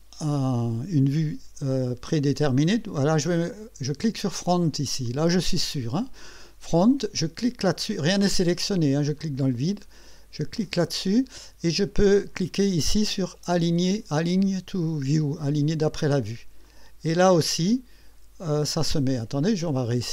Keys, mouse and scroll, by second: 1.7-2.6 drag, 4.4 click, 4.7 click, 9.2 click, 10.6 click, 16.7 click, 17.7-18.7 drag.